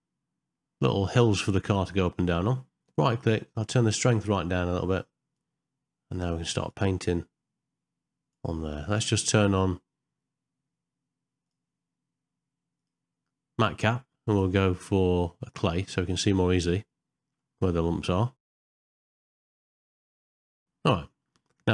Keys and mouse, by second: 4.0-5.4 right drag, 6.7-8.3 drag, 12.8-15.8 drag, 16.2-17.4 middle drag, 17.8 shift+middle click, 18.4 click, 19.1 right click, 19.5 click, 20.4 middle click, 20.6 Tab, 21.1 middle click.